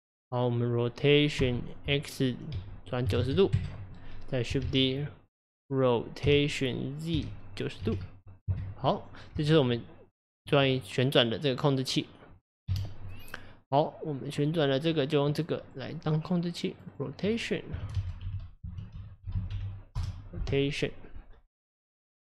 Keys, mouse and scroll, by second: 1.4 r, 4.7 shift+d, 9.4 Tab, 10.8-12.7 middle drag, 12.7 KP_Divide, 14.6 click, 14.9 click, 15.7 click, 16.8 click, 17.0-20.0 drag, 21.9 click, 22.2 click.